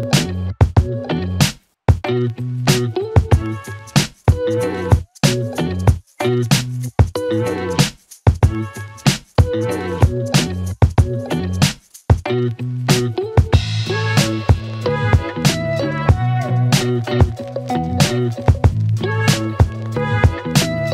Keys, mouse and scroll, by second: 2.6-3.2 drag, 4.6-5.3 click, 6.3-10.2 click, 12.1 p, 13.5 click, 15.1 click, 18.7-20.2 click.